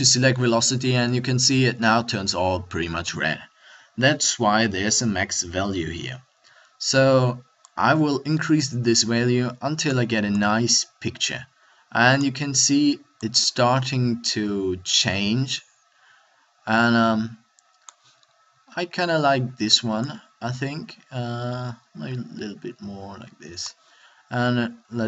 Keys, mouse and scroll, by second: 12.2 middle click, 15.4-18.1 middle drag, 18.1-18.6 scroll up 1, 21.9-25.0 middle drag.